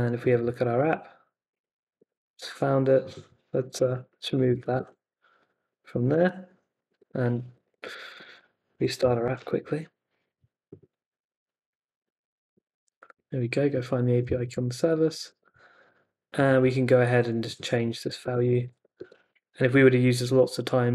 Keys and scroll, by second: 0.8 super+r, 2.0 super+Tab, 3.8 d, 4.5 super+s, 4.8 super+Tab, 6.1 super+r, 7.0 super+Tab, 8.3 ctrl+c, 8.7 Up, 9.0 Return, 9.3 super+Tab, 11.1 super+r, 14.6 super+Tab, 17.7-19.3 typing, 18.0 Left, 19.3 super+s.